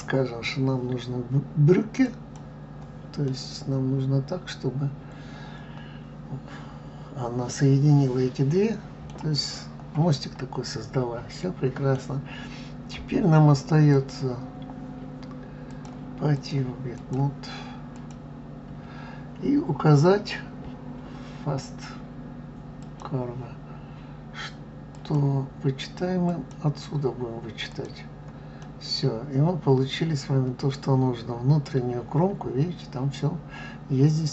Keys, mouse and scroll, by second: 3.3-6.2 middle drag, 9.5 scroll up 2, 10.7-13.6 middle drag, 13.9 click, 15.7-17.1 drag, 17.9 click, 22.8 click, 24.9 click, 27.7 click, 28.6-31.6 middle drag.